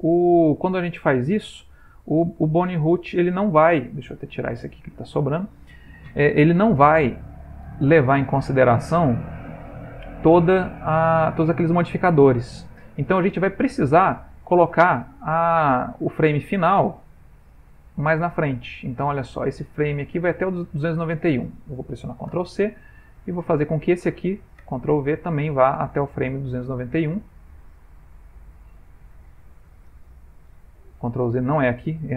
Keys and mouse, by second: 3.5 click, 4.4 Delete, 5.2 click, 8.7 click, 17.2 middle click, 17.7 ctrl+middle click, 17.9 ctrl+middle click, 18.6 middle click, 18.9 ctrl+middle click, 19.8 click, 22.3 ctrl+c, 23.4 click, 24.8 ctrl+v, 26.3 click, 31.1 ctrl+z.